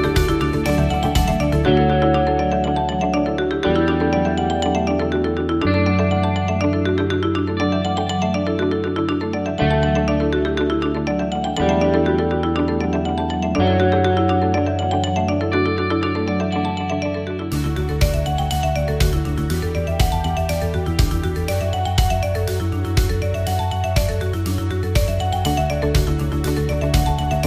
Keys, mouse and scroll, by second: 0.8 click, 6.0 click, 15.7-16.2 scroll up 1, 16.2-19.0 scroll down 1, 19.0 f, 25.1 click, 26.3 click, 26.9 click.